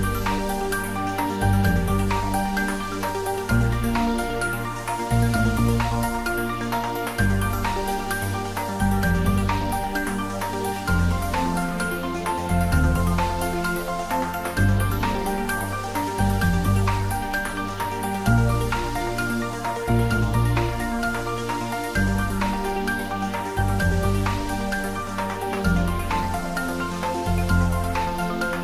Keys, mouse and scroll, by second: 0.5 g, 1.0 z, 2.8 click, 6.3 g, 6.7 y, 14.2 Right, 15.1 click, 17.8 y, 18.3 Right, 19.9 Left, 21.5 click, 24.2 click.